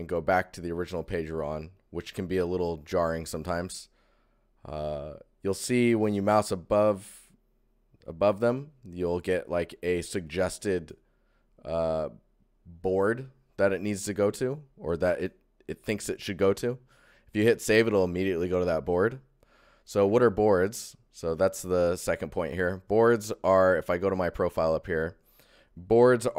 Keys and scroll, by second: 1.5 ctrl+1, 19.5 ctrl+1, 23.8 ctrl+shift+1.